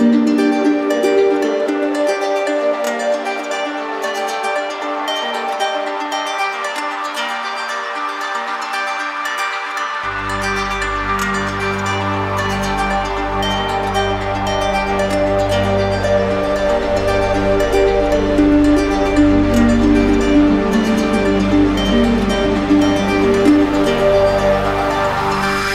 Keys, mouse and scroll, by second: 0.1 alt+click, 2.7 click, 3.0 shift+click, 3.6 alt+click, 4.1 click, 5.1 click, 5.5 alt+click, 7.4 click, 7.9 alt+click, 8.6 click, 9.1 alt+click, 11.9 click, 12.2 shift+click, 12.8 alt+click, 13.3 click, 15.6 click, 16.2 shift+click, 17.0 alt+click, 17.7 alt+click, 17.7 alt+click, 18.5 click, 19.4 click, 19.9 alt+click, 24.3-25.4 right drag.